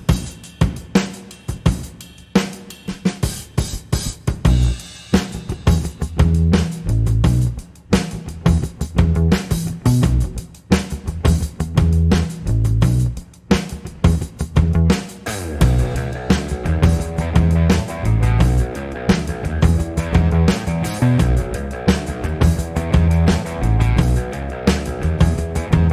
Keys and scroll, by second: 21.0 ctrl+d.